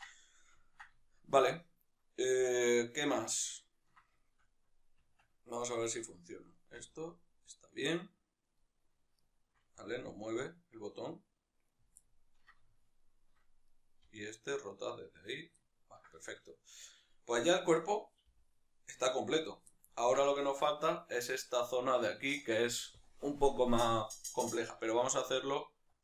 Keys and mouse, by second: 5.3 Tab, 5.6-6.8 right drag, 6.8 r, 8.6 right click, 9.2-11.8 ctrl+middle drag, 9.8 r, 11.8 right click, 12.0-13.7 ctrl+middle drag, 13.7-14.1 right drag, 14.1 r, 15.3 right click, 15.7-19.5 ctrl+middle drag, 18.3 g, 19.5 right click, 19.7-20.1 middle drag.